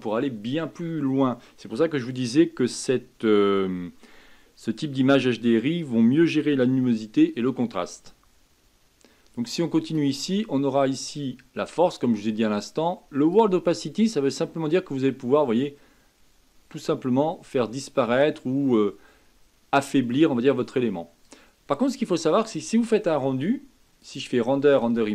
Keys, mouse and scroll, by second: 9.8-12.9 drag, 24.0-25.1 drag.